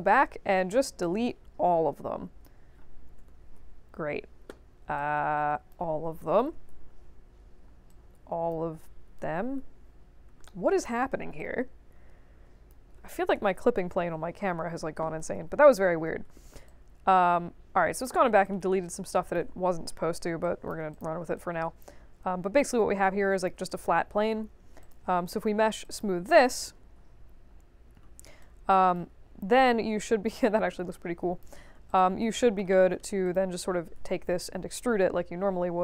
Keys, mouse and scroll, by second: 1.0-2.4 drag, 4.9-5.7 drag, 7.8-8.5 drag, 10.4 middle click, 11.3-12.6 drag, 15.2 space, 15.9 space, 16.6-17.9 alt+drag, 18.1 alt+middle click, 18.8 right click, 20.0 ctrl+1, 20.4 alt+click, 20.9 click, 21.3-23.4 alt+drag, 23.6 click, 24.8 click, 25.8 click, 28.4 right click, 29.3 middle click, 30.3 click, 30.9-31.4 alt+drag, 31.8 click, 32.7 middle click, 33.2 click.